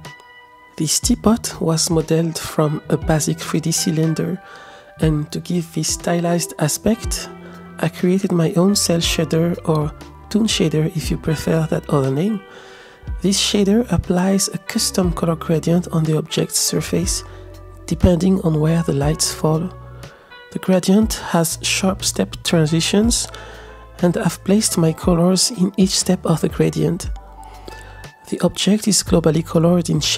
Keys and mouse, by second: 0.0 middle click, 1.1 middle click, 2.0 click, 3.7-4.6 middle drag, 7.0 click, 7.1-8.6 shift+middle drag, 12.2 shift+middle click, 13.9-14.5 drag, 16.1-16.6 shift+drag, 17.3-17.6 shift+drag, 18.2 shift+middle click, 21.2 click, 22.5-26.8 drag, 29.2 ctrl+z, 29.4 ctrl+z.